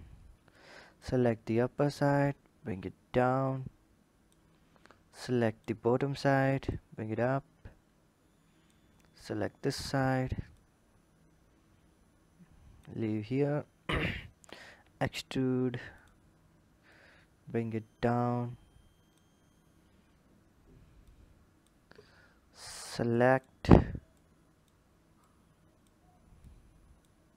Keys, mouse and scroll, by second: 0.5 click, 1.7 click, 5.0 click, 6.6 click, 10.4 click, 16.9 click, 20.0-20.9 scroll up 3, 20.9 scroll up 1, 20.9 click, 21.3 click, 22.2 scroll up 1, 23.1 click, 24.1 click, 25.1 click.